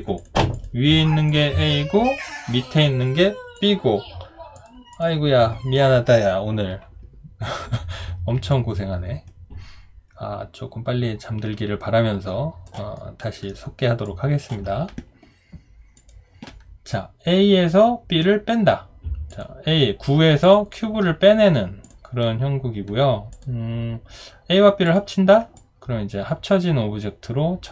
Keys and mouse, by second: 8.5 alt+click, 13.0 alt+right click, 13.5 alt+middle click, 14.0 alt+click, 25.6 alt+click.